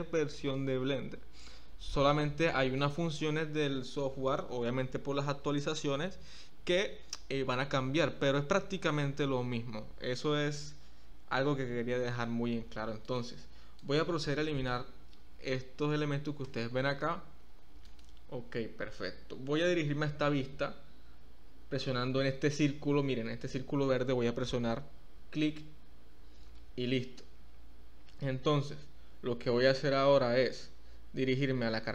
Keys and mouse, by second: 1.8 click, 13.8 click, 16.4 x.